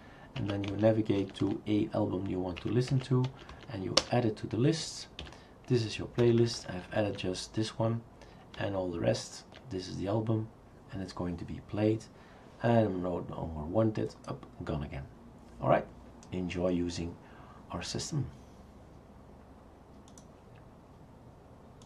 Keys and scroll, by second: 0.0 Down, 0.4 Up, 0.7 Right, 1.2 Down, 1.4 Down, 2.6 Up, 2.9 Up, 3.3 Down, 3.5 Down, 4.0 Return, 5.2 1, 6.2 Down, 6.4 Down, 6.6 Down, 6.8 Down, 6.9 Down, 7.1 Down, 8.6 Down, 9.1 Down, 9.1-9.5 Down.